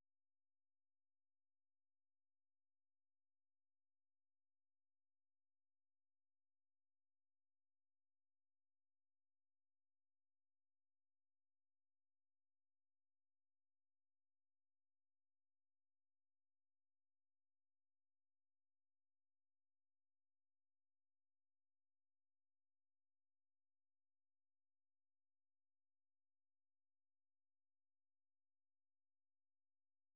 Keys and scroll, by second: 2.0 ctrl+p, 3.0 ctrl+n, 3.1 ctrl+p, 4.4 ctrl+n, 4.7 ctrl+p, 5.5 ctrl+n, 5.7 ctrl+n, 6.4 ctrl+n, 7.8 ctrl+p, 8.3 ctrl+p, 8.6 ctrl+n, 9.1 ctrl+n, 9.3 ctrl+p, 9.6 ctrl+p, 10.6 ctrl+p, 12.2 ctrl+p, 12.4 ctrl+p, 14.5 ctrl+n, 14.7 ctrl+n, 15.0 ctrl+n, 16.1 ctrl+p, 17.8 ctrl+n, 19.1 ctrl+p, 19.3 ctrl+p, 19.5-20.2 typing, 23.1 Return, 23.9-25.9 typing, 27.2 typing, 28.4-30.1 typing.